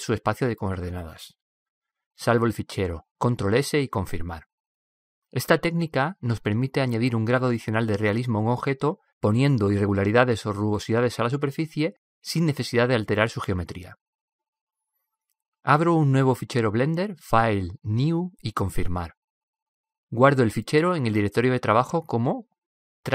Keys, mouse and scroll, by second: 0.5-2.2 drag, 2.4 click, 4.6 c, 16.5-18.4 drag, 21.6 n, 22.4 click.